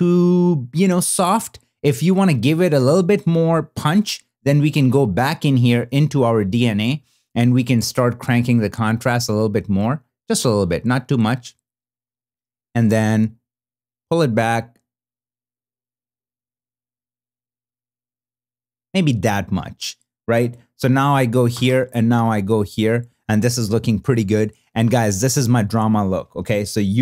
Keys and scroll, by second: 20.8 super+b, 21.6 super+n.